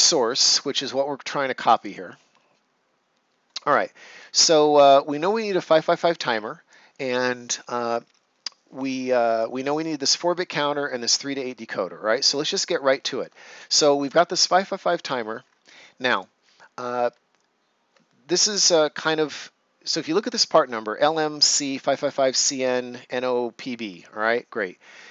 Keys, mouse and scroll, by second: 1.7 click, 12.5 right click, 13.9 click, 14.9-15.7 ctrl+scroll up 1, 16.0 click.